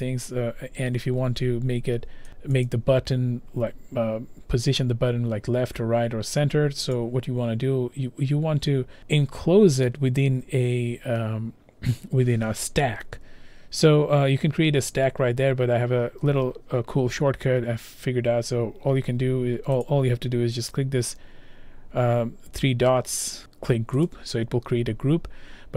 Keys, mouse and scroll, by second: 2.3 click, 2.7 click, 7.0 click, 9.0 click, 19.8 click, 20.7 click, 24.1 click.